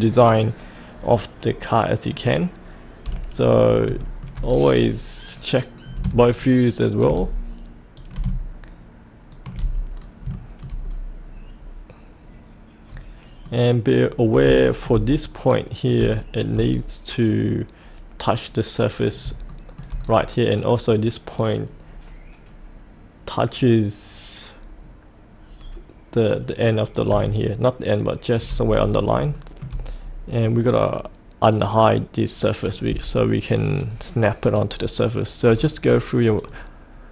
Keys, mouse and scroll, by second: 2.0 click, 3.0-3.8 scroll down 1, 4.0 shift+middle click, 4.5-5.5 scroll down 1, 5.5-9.9 drag, 9.9 scroll down 1, 10.3 shift+middle click, 10.8-11.5 scroll down 1, 11.5-13.4 scroll up 1, 13.4 middle click, 14.2 scroll up 1, 14.6 shift+middle click, 16.1 shift+middle click, 16.6-18.2 scroll down 1, 19.4 shift+middle click, 20.0-25.6 scroll down 1, 26.9-28.3 drag, 28.6-28.9 scroll up 1, 29.3 shift+middle click, 30.0-31.5 scroll up 1, 31.5 click, 35.5-36.3 scroll down 1, 36.3 click.